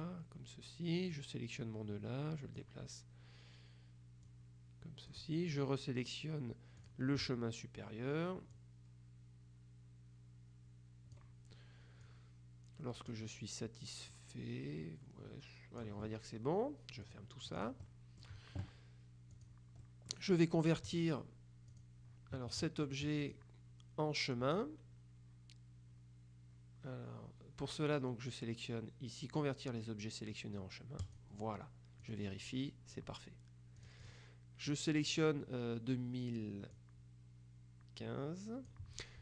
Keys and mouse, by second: 1.2-3.2 drag, 4.4 click, 6.9 click, 8.7-11.7 drag, 12.1-13.7 drag, 14.2-16.4 drag, 17.1 click, 17.9 middle click, 19.4 click, 19.9 middle click, 21.8 click, 23.3 click, 31.1 click, 32.1 click, 33.9 click, 36.9 click.